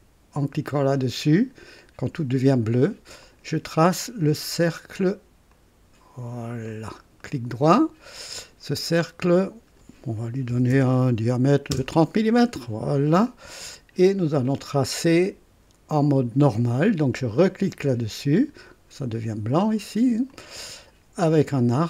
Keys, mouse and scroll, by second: 3.2 click, 5.4 click, 6.7 click, 7.2 right click, 8.4 click, 9.3 click, 10.5 KP_3, 10.6 KP_0, 11.7 Return, 11.7 KP_Enter, 13.0 scroll up 2, 13.7 right click, 17.4 click, 20.2 click.